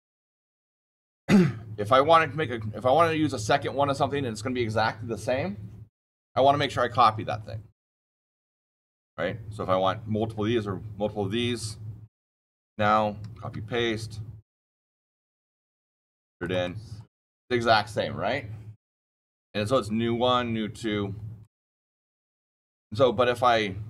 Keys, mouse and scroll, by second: 8.7 click, 11.4 click, 12.5 click, 13.1 ctrl+c, 13.4 ctrl+v, 14.4 middle click, 15.8 click, 16.3 click, 16.5 middle click, 21.3-23.8 drag.